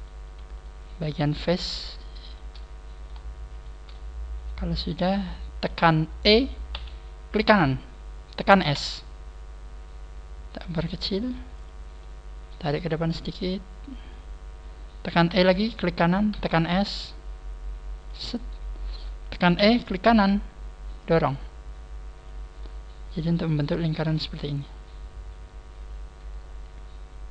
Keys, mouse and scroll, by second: 1.3 shift+right click, 1.5 shift+right click, 2.5 shift+right click, 2.5 middle click, 3.5 shift+right click, 3.9 middle click, 7.4 right click, 7.4 e, 8.7 s, 11.6 click, 11.9 click, 11.9 middle click, 13.1 click, 15.7 right click, 15.7 e, 18.0 s, 18.3 click, 18.3 middle click, 19.5 e, 20.9 right click, 20.9 click, 22.5 middle click, 23.5 Tab, 23.7 scroll down 4, 24.1 middle click.